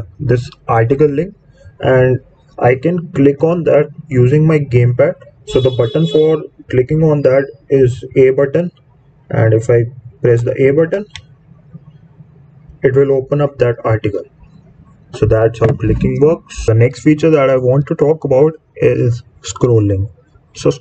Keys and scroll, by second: 10.9 a.